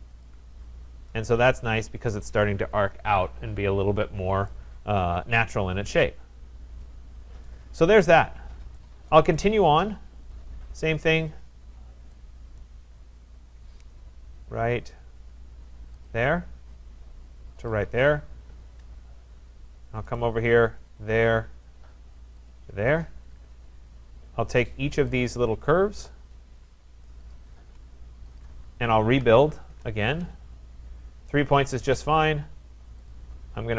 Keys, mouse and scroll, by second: 0.2 click, 0.7 middle click, 0.8 middle click, 0.9 middle click, 2.1 right click, 6.8 right click, 7.4 right click, 9.4 right click, 10.3 click, 12.6 right click, 12.9-13.6 scroll, 16.1 click, 17.8 click, 18.4 Return, 19.0 scroll, 19.5-20.1 scroll, 20.1 right click, 21.0 click, 22.5 click, 23.3 Return, 25.2 click, 25.5 scroll down 2, 26.1-26.4 scroll up 2, 27.3 shift+click, 27.5 scroll, 28.4 click, 28.9-29.9 typing, 32.1 click, 33.1 click.